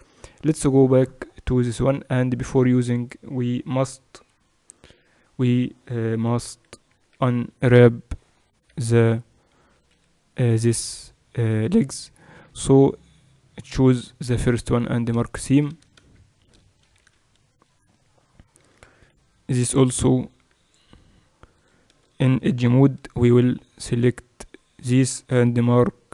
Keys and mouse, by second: 2.4-4.2 right drag, 4.5 KP_1, 5.9-7.7 typing, 9.7 KP_Divide, 10.7 Tab, 13.7 ctrl+e, 15.5 z, 16.8 KP_3, 18.5 b, 21.5-25.0 drag, 21.7 a, 22.7 b, 25.3 ctrl+e.